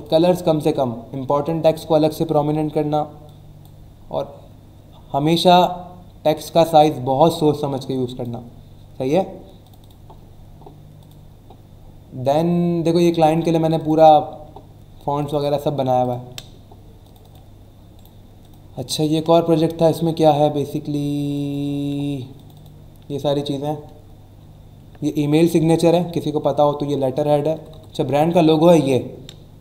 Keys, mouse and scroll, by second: 3.2 click, 7.9 click, 9.6 click, 11.0 click, 13.8 click, 15.2 click, 16.0 click, 17.0 click, 17.9 right click, 18.4 click, 18.7 click, 21.2 click, 22.3 click, 25.8 Right.